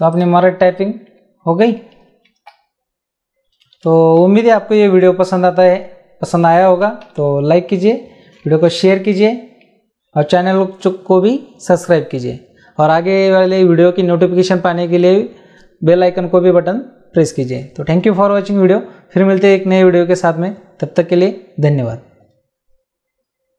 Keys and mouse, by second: 0.1 click, 2.2 t.